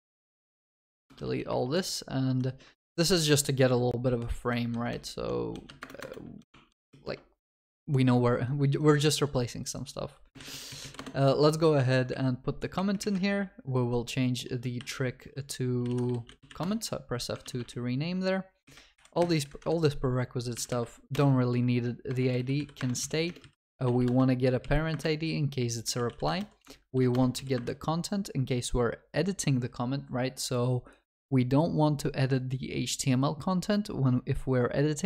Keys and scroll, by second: 1.2 ctrl+v, 5.8 alt+Return, 11.0 Return, 14.8 shift+F6, 17.5 ctrl+s, 22.8 Return.